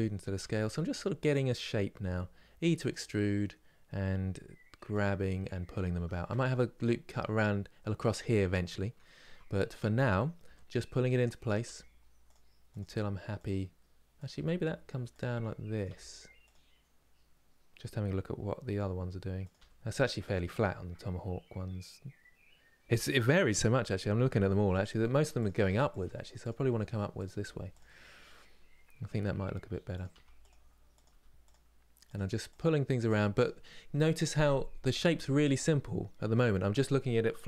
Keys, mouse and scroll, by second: 0.1 s, 4.7 click, 10.2 g, 11.2 click, 11.3 g, 12.5 click, 12.6 g, 13.9 click, 14.0 g, 15.5 click, 15.6 g, 19.2 click, 19.3 g, 24.5 click, 24.7 g, 25.7 click, 25.7 g, 26.9 click, 27.0 g, 29.7 click, 29.8 g, 30.7 click, 30.8 g, 31.8 click.